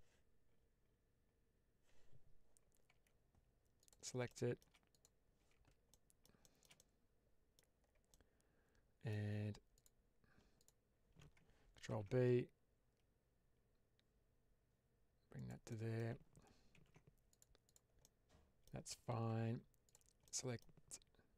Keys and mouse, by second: 2.8 Tab, 3.7 click, 4.2-4.6 shift+middle drag, 4.8 click, 5.3 Tab, 5.8 middle click, 6.3-7.4 middle drag, 8.0-9.0 middle drag, 9.9 alt+click, 10.5 alt+click, 11.8 ctrl+b, 15.3 click, 15.6 middle click, 16.6 ctrl+r, 17.5 click, 17.9 middle click, 19.2 1, 20.1 middle click.